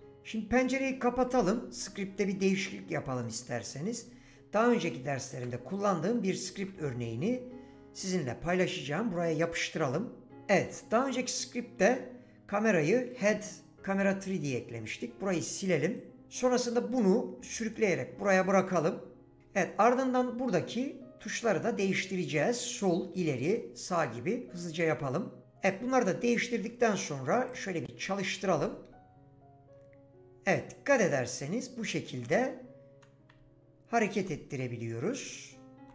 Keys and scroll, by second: 6.5 ctrl+a, 14.7 BackSpace, 28.8 w, 33.4 s, 34.3 d, 35.0 w.